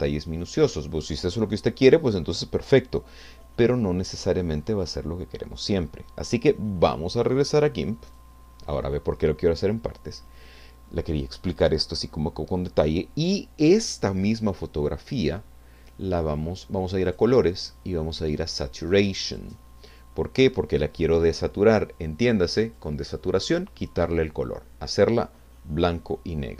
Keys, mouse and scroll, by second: 0.3-0.8 scroll down 2, 1.3 scroll down 2, 8.1 click, 17.1 click, 19.3 click, 21.9 click.